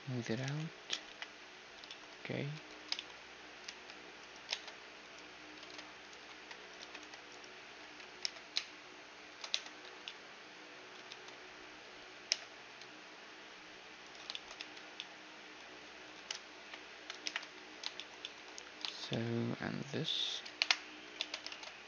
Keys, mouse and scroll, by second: 0.4-2.2 drag, 0.4 t, 1.0 KP_1, 1.8-4.9 middle drag, 2.5 Tab, 3.8 ctrl+r, 4.5 ctrl+Tab, 5.6 ctrl+Tab, 6.3-8.2 typing, 7.3-9.1 drag, 9.5 Tab, 9.8 a, 10.0-14.0 middle drag, 11.0 Tab, 12.2 i, 14.5 Tab, 14.5-16.0 middle drag, 16.1-17.7 typing, 19.8-21.8 right drag, 20.5 KP_Decimal, 20.7 click, 21.2 Tab.